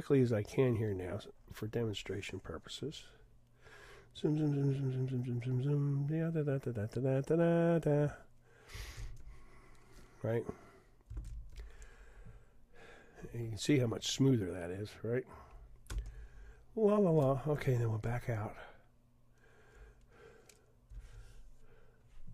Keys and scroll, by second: 9.0 super+f, 11.3 super+d, 18.1 super+0.